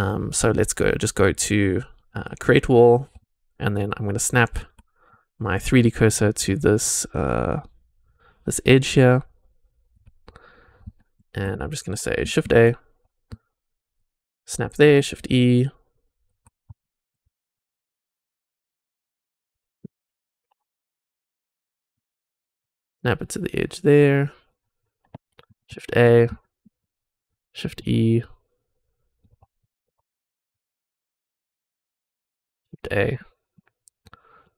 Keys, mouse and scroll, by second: 2.1 click, 3.2-4.6 shift+right drag, 4.8-5.1 scroll up 3, 5.2 shift+middle drag, 5.7-9.8 shift+right drag, 10.1-10.9 scroll down 4, 10.9 shift+middle click, 11.5-12.1 scroll up 2, 12.4 shift+a, 13.3-14.0 shift+right drag, 14.8 shift+e, 15.1-16.2 shift+right drag, 16.4 scroll up 3, 16.7 shift+middle drag, 17.3-17.6 scroll up 2, 17.6-21.4 shift+right drag, 21.6-22.0 scroll up 3, 22.1-24.4 shift+right drag, 24.7-25.3 scroll down 6, 25.7 shift+a, 26.0 scroll up 2, 26.3 shift+middle drag, 26.7-27.3 shift+right drag, 27.7 shift+e, 28.2 shift+right click, 29.5 shift+middle click, 30.0 scroll up 3, 30.6-32.0 shift+right drag, 32.2 scroll down 3, 32.6 shift+a, 33.1-33.5 shift+middle drag, 34.0 shift+right click, 34.0 shift+click.